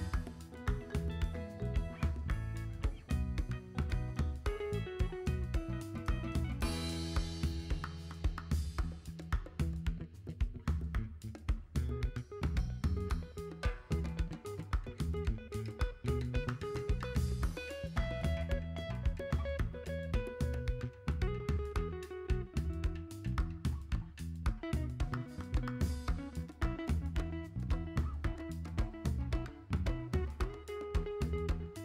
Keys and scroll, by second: 9.9 x, 10.6 v, 12.5 g.